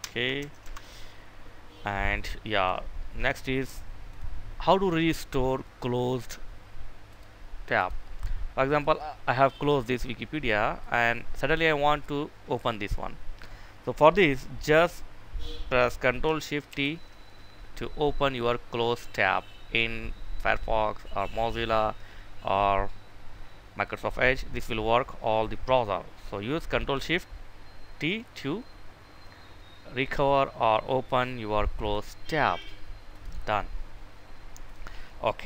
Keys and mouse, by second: 3.8-7.5 drag, 9.1 click, 16.4 ctrl+shift+t, 16.9 ctrl+shift+t, 17.3 ctrl+shift+t, 17.9 ctrl+shift+t, 18.4 ctrl+shift+t, 18.7 ctrl+shift+t, 31.5 click.